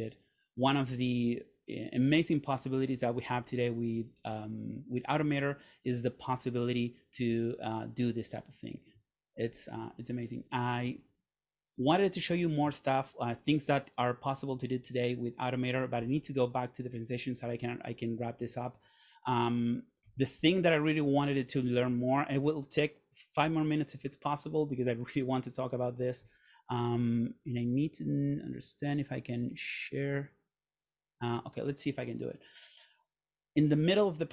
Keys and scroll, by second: 9.6 super+., 18.2 Right, 19.0 Right, 20.2 Left.